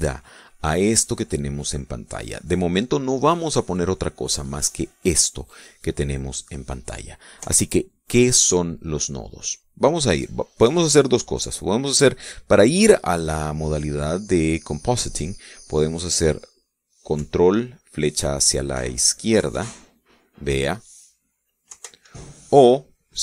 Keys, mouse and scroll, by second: 7.9 Escape, 19.9 ctrl+Left, 22.2 ctrl+Right.